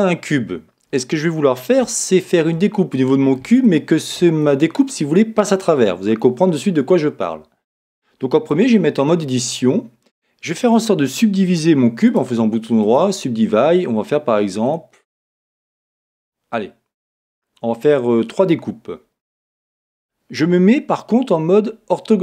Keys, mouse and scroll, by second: 0.0-8.4 middle drag, 8.5 Tab, 12.1 right click, 14.6-16.6 drag.